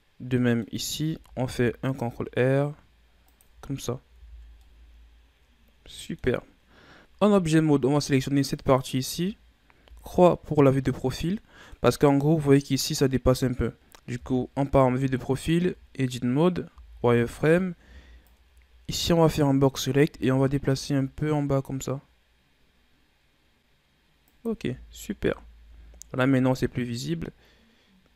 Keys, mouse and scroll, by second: 0.7-1.3 scroll up 1, 1.3 ctrl+r, 3.3 Tab, 3.7-4.0 scroll down 1, 4.0 a, 4.2 scroll down 1, 4.5-7.0 middle drag, 7.0 KP_1, 8.4 right click, 9.7 KP_3, 11.1-11.7 middle drag, 11.7-13.4 scroll up 4, 13.7 right click, 14.1 KP_3, 15.4 Tab, 16.6 z, 17.2 right click, 17.7 b, 19.9 g, 25.0 Tab, 25.5 a, 25.7-26.1 scroll down 2, 26.1-28.1 middle drag.